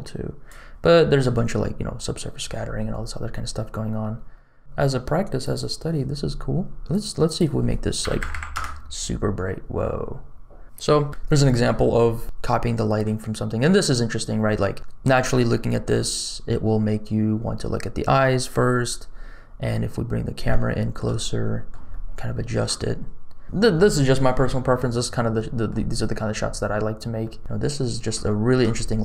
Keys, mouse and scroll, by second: 4.1 middle click, 5.3 click, 7.2-8.5 drag, 8.2 KP_0, 12.0-12.6 scroll down 1, 12.6 middle click, 19.7-20.4 scroll up 2, 20.6 shift+middle click, 21.1 middle click, 21.8 shift+middle click, 22.6 middle click, 25.3 middle click, 27.1 shift+middle click, 27.4 scroll down 3, 28.2 shift+middle click, 28.7-29.0 middle drag.